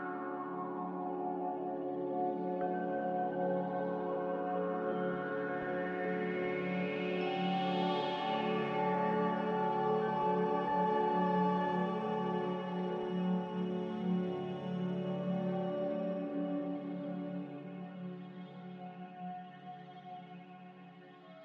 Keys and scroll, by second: 4.4 1, 4.4 8, 7.3 z, 11.1 5, 11.3 0, 11.7 Return, 19.4 4, 19.5 0, 20.0 Return.